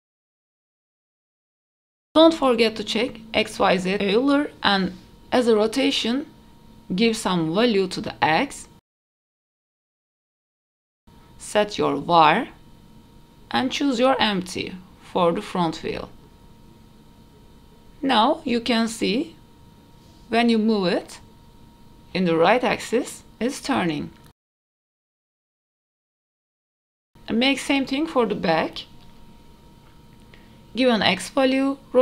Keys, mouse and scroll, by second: 0.2 click, 0.4 shift+middle click, 0.8 n, 1.0 middle click, 1.8 click, 3.4 click, 7.0-10.4 drag, 11.0-16.9 right drag, 17.6 click, 18.8 g, 20.5 g, 24.0 shift+middle click, 24.6 g, 26.0 shift+middle click, 26.3 click, 26.6 shift+middle click, 28.3-31.3 drag.